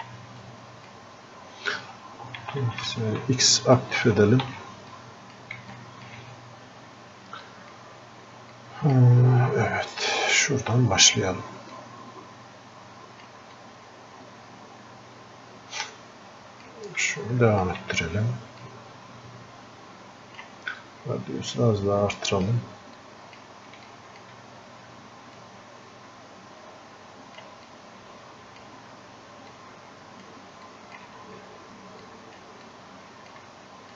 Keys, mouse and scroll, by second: 17.2-19.0 alt+drag, 19.0-33.9 drag, 29.9 typing.